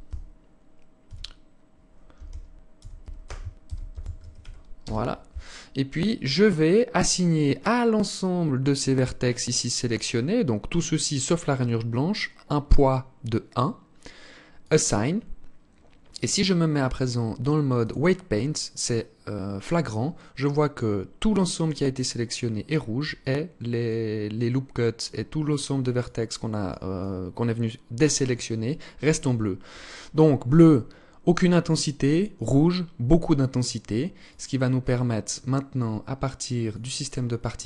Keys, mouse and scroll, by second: 13.7 click, 17.0 click, 17.7 scroll down 2, 18.3-18.7 scroll up 2, 18.7 scroll down 1, 22.3 alt+click, 25.1 alt+click, 26.1 alt+click, 27.7 alt+click, 34.3 click, 35.8 click, 36.9-37.3 scroll down 6.